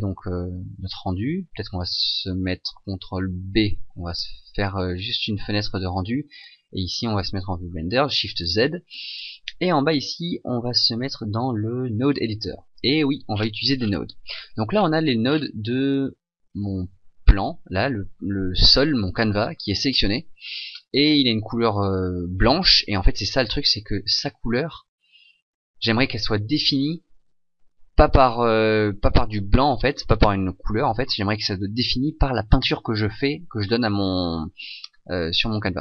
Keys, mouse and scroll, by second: 3.2 ctrl+b, 7.6 shift+z, 13.2 shift+z, 16.8 right click, 16.8-18.8 scroll up 10.